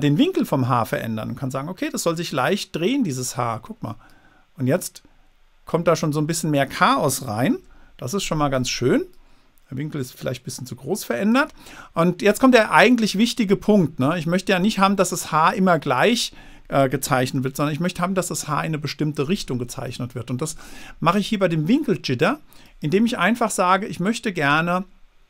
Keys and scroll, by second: 8.0 super+z, 17.7 super+z.